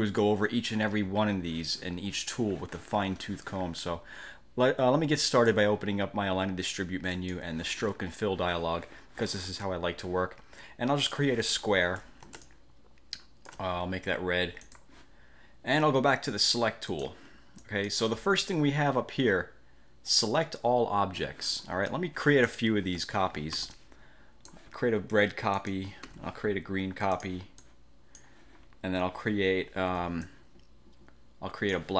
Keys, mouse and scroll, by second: 5.5 click, 7.3 click, 11.1 click, 12.5-13.8 ctrl+shift+drag, 14.7 click, 17.0 click, 17.7 click, 22.1-22.8 drag, 23.7 ctrl+d, 23.9-24.8 ctrl+drag, 25.7 click, 26.2 ctrl+d, 27.3 click, 27.7 click, 30.0 ctrl+d, 30.3-31.9 ctrl+drag.